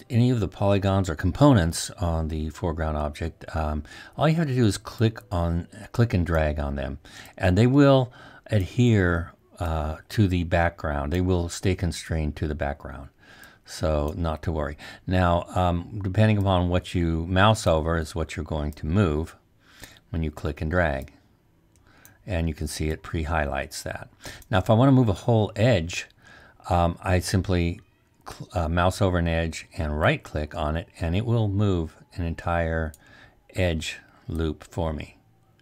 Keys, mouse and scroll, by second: 5.4-11.3 drag, 30.2-35.4 right drag.